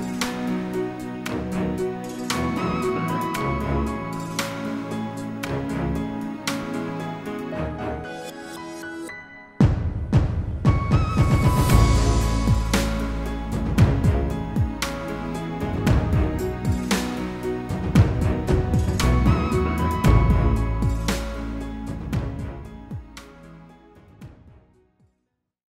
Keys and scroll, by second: 10.4 ctrl+g.